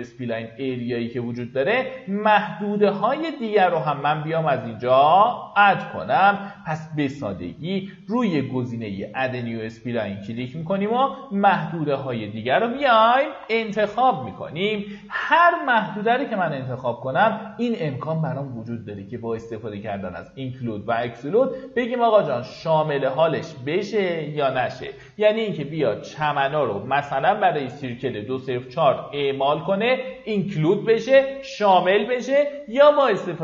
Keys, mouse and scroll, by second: 13.4 q, 17.6-19.7 drag.